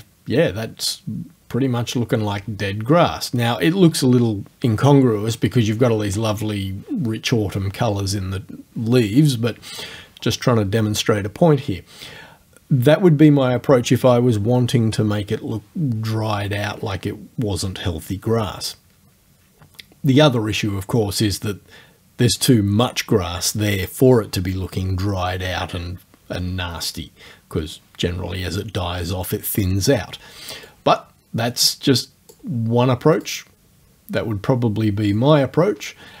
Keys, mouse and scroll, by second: 30.7-32.5 drag, 33.2 click, 35.2-36.2 drag.